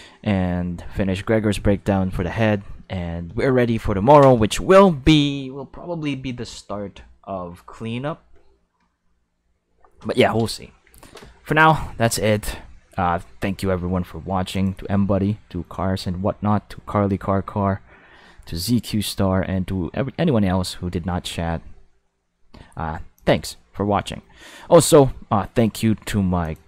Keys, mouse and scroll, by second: 0.5 middle click, 3.9 shift+middle click, 14.5 click, 16.3 middle click, 17.3 middle click, 19.1 middle click, 23.2 click, 26.4 click.